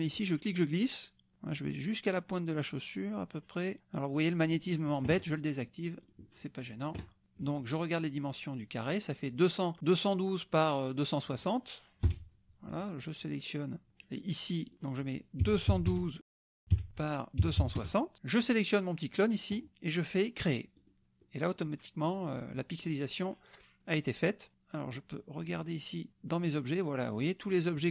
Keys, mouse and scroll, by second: 0.1-5.1 drag, 6.0 click, 7.2 click, 11.2 click, 12.2 Delete, 14.6 click, 15.4-17.8 typing, 16.9 Tab, 18.4 click, 20.7 click, 24.8 click, 25.5 click, 27.2-27.9 scroll up 2.